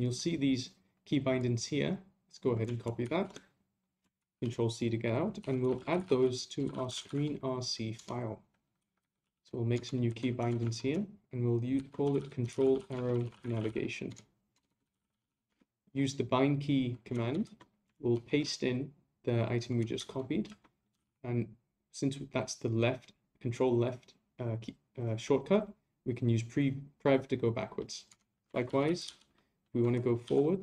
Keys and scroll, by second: 3.0 shift+c, 4.2 ctrl+c, 18.1 shift+v, 28.5 ctrl+c.